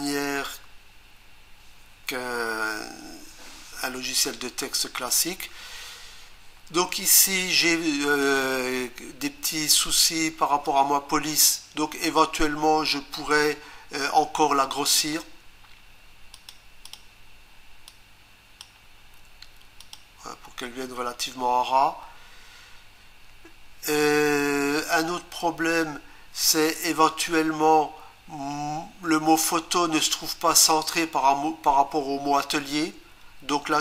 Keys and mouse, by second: 10.7 click, 16.3 click, 16.9 click, 16.9 double click, 17.9 click, 19.8 click.